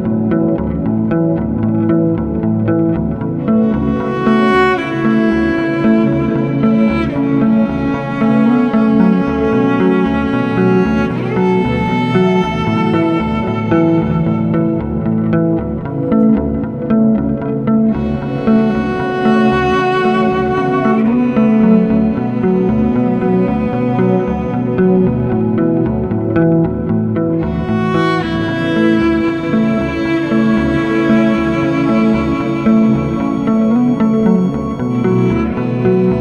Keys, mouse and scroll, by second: 0.5 click, 0.9 scroll, 1.5-2.5 scroll, 2.6 w, 2.9 scroll, 4.8 s, 5.3 click, 6.5 middle click, 6.7 middle click, 6.8 middle click, 6.8 middle click, 6.8-7.4 scroll, 7.5 click, 8.8 right click, 10.4 click, 11.0 e, 12.2 a, 14.8 click, 15.8 click, 16.1 s, 16.7 right click, 17.9 click, 18.6 middle click, 18.8 w, 20.5 scroll, 22.6 click, 23.6 click, 27.7 click, 28.0 middle click, 31.3-32.5 scroll, 32.5 click, 34.7 scroll, 35.4 click.